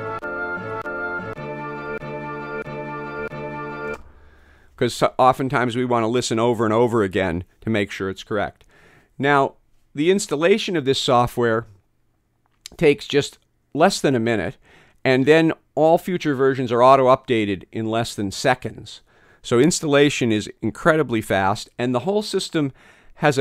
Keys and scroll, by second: 0.1 F9, 1.3 F10, 1.9 F10, 2.6 F10, 3.2 F10, 3.9 space.